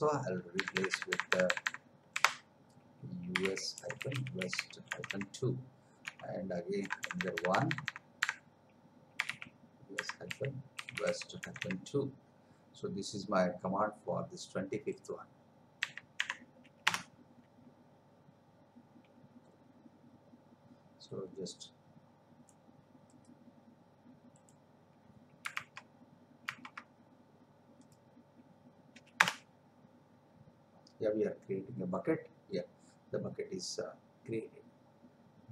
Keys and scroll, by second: 0.6 BackSpace, 2.1 Delete, 4.0 w, 6.8 BackSpace, 9.2 u, 10.3-11.6 typing, 15.8 2, 16.8 Return, 25.7 alt+Tab, 29.2 Return.